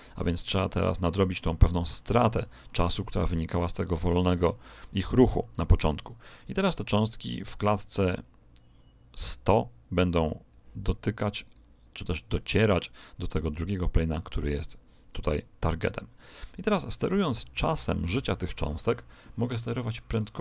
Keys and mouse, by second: 6.1 click, 11.4 right click, 15.2 click.